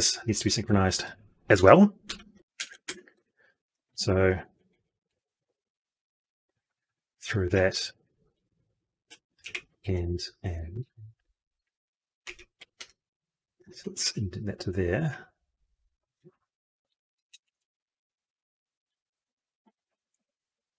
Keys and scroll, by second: 3.8 ctrl+c, 5.5 ctrl+v.